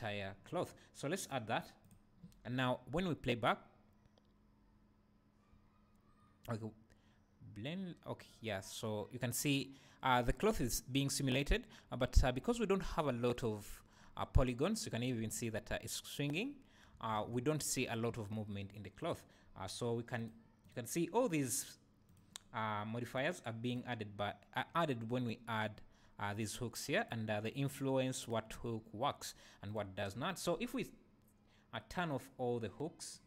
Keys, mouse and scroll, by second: 1.2-19.1 drag, 3.1 space, 16.9 Escape, 20.2 click, 20.6 click, 22.1 click, 23.1 click, 23.7 click, 27.0 click, 28.2 click, 29.7 click, 31.9-33.2 drag.